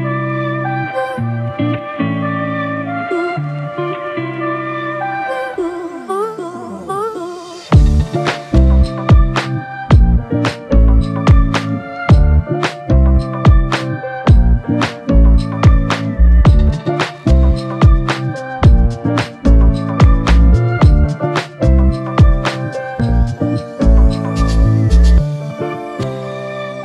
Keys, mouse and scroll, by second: 2.6-3.3 scroll down 1, 15.9 alt+shift+click, 20.1 alt+click, 21.1 ctrl+alt+click, 25.3 ctrl+alt+click.